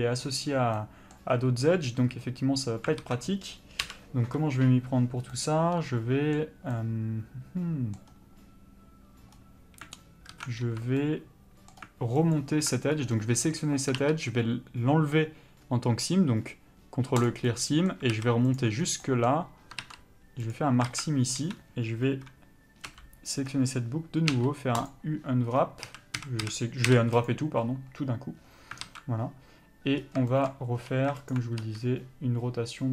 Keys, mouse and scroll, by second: 0.9 middle click, 3.0 alt+a, 3.8 l, 5.3 middle click, 10.3 alt+a, 10.6 2, 11.0 middle click, 12.3 alt+click, 12.9 scroll up 1, 13.2 middle click, 17.3 ctrl+e, 17.5 middle click, 18.1 alt+a, 18.6 alt+click, 18.8 scroll down 1, 19.0 middle click, 20.5 ctrl+e, 20.9 alt+a, 21.4 3, 22.9 l, 23.5-24.3 scroll down 1, 24.9 u, 25.9 a, 27.2 u, 28.9 alt+a, 30.8 2, 31.3 alt+click, 31.6 r.